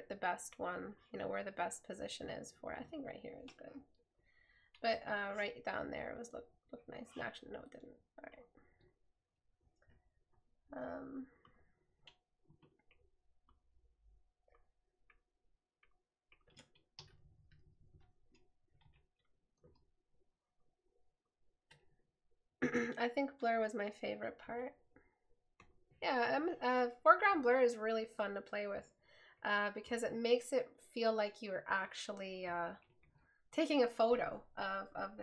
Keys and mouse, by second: 19.1 right click, 24.8 right click, 28.6 right click.